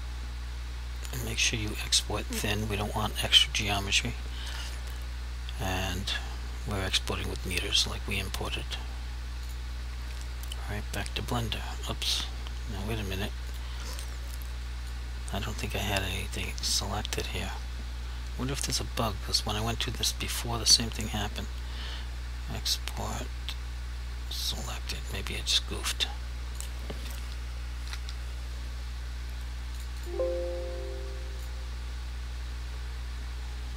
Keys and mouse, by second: 9.5 click, 13.6 click, 15.0 click, 21.0 click, 24.7 click, 27.8 s, 28.0 g, 29.8 click, 32.1 click.